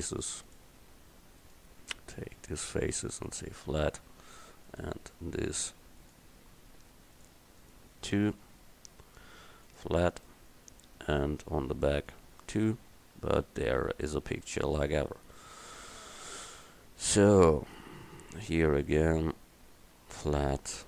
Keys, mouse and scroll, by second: 3.5-4.7 middle drag, 4.9-7.0 right drag, 7.0-9.7 middle drag, 9.7 click, 10.6-11.6 middle drag, 11.7 middle click, 12.4 Tab, 17.2 Tab, 18.5-20.2 drag, 20.5 click.